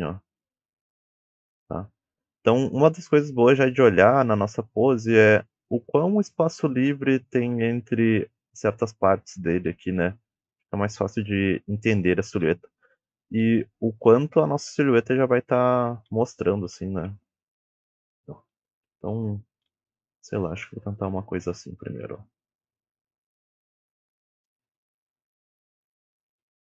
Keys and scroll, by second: 4.0 a, 10.7 a, 12.2 w, 13.3 s, 14.9-18.5 typing, 19.6-22.2 typing, 25.3 d, 26.2 s.